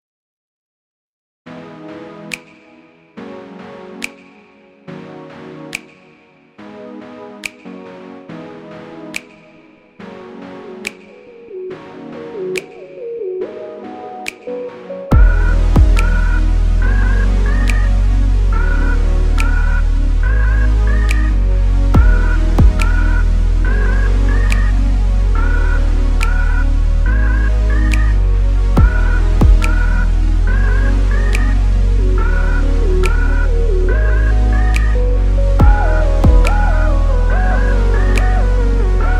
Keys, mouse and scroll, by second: 0.1 ctrl+click, 0.6 v, 0.8 click, 1.2 g, 2.0 ctrl+z, 2.6 click, 3.0 3, 3.1 click, 3.4 ctrl+click, 3.8 g, 7.4 alt+m, 8.4 Tab, 8.8 click, 9.1 ctrl+click, 9.3 ctrl+click, 9.5-11.7 middle drag, 10.0 g, 11.5 2, 11.7 alt+click, 12.3 alt+shift+click, 12.6 alt+shift+click, 13.6 ctrl+z, 13.8 shift+click, 14.0 shift+click, 14.5 ctrl+e, 15.9-17.3 middle drag, 16.7 g, 17.3 click, 17.6 ctrl+click, 17.9 g, 18.5-21.0 middle drag, 19.0 r, 21.0 KP_3, 21.7 r, 22.4 KP_Enter, 23.3 Tab, 24.0-25.4 drag, 25.4 middle click, 25.7 scroll down 2, 25.8 middle click, 26.2-27.8 drag, 27.8 middle click, 28.3 click, 29.4-31.0 middle drag, 32.3 click, 32.6 scroll up 1, 32.7 Tab, 32.9 middle click, 33.3 click, 33.8 shift+click, 34.3 2, 34.8 ctrl+click, 35.1 ctrl+click, 35.2 ctrl+click, 35.8 ctrl+click, 36.3 shift+click, 36.7 ctrl+e, 37.7 click, 38.0 ctrl+click, 38.3 2, 38.6 shift+click, 38.8 click.